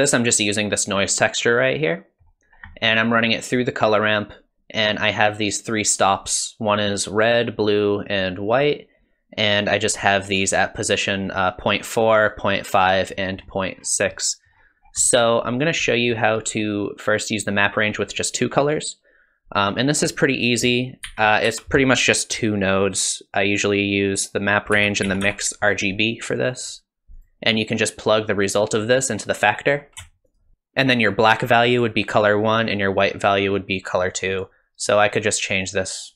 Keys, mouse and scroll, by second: 1.5 middle click, 2.5 scroll up 4, 2.7 middle click, 2.9 scroll down 1, 5.3 click, 5.6 click, 12.2 click, 12.8 click, 13.8-14.2 scroll down 5, 14.2 middle click, 14.6 scroll up 1, 14.8 scroll down 3, 15.0 middle click, 15.5-15.9 scroll up 3, 15.9 middle click, 16.5-17.9 scroll up 1, 18.3 click, 20.6 click, 21.1 shift+a, 28.1 click, 30.3 ctrl+shift+click, 34.1 click.